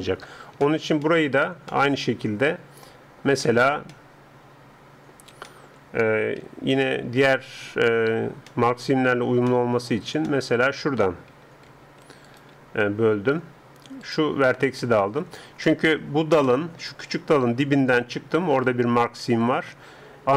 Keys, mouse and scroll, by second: 6.4 a, 11.3 a, 11.7 a, 12.3-14.8 alt+right drag, 14.8 alt+click, 14.8-20.3 alt+middle drag, 15.4-16.5 right drag.